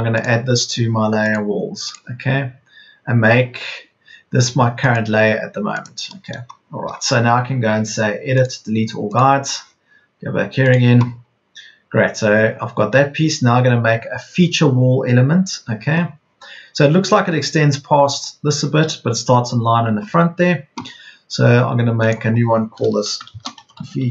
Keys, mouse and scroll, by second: 23.0-24.1 typing.